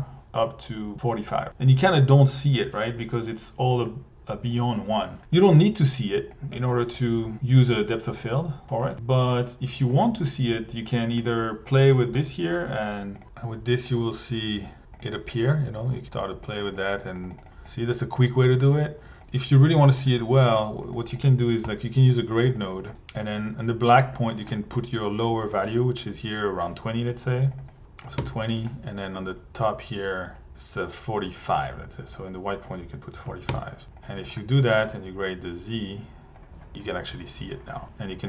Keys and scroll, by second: 21.6 g, 28.0 2, 28.2 Home, 33.2 4, 33.5 Home, 34.1 1.